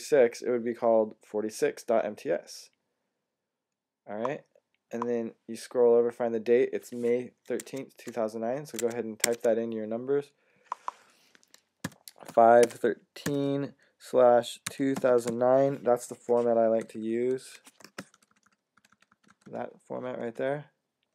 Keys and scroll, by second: 7.4 Tab, 8.7 super+Tab, 8.8 super+Tab, 9.1 super+Tab, 9.2 super+Tab, 11.4-15.6 typing, 16.7 =, 17.2 super+=, 17.8-18.6 typing, 18.7 alt+super+=, 19.3 alt+super+=, 19.9 alt+super+=.